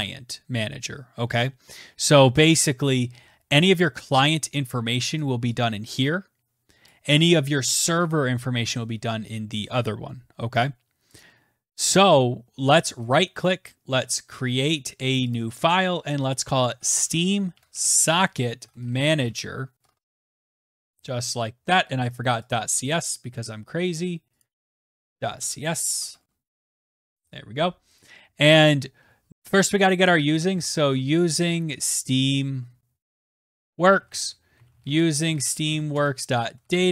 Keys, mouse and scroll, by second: 5.1 click, 6.8 click, 11.1 click, 11.9 click, 13.1 right click, 15.3 click, 16.3-21.1 typing, 22.1 click, 22.4 click, 23.0 middle click, 23.1 typing, 24.3 click, 24.7-27.3 typing, 27.9 click, 29.3 scroll, 29.5 click, 29.9-36.9 typing.